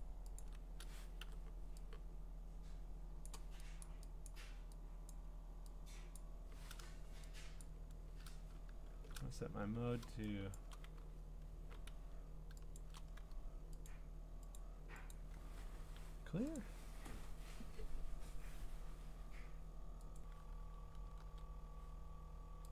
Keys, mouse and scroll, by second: 0.0 ctrl+click, 0.4 ctrl+click, 3.2 click, 3.8 click, 4.3 click, 5.1 click, 6.2 click, 7.6 click, 8.9 alt+shift+c, 10.6 click, 12.8 click, 13.9 click, 14.6 click, 15.1 click, 16.6 click, 20.2 click, 21.2 g.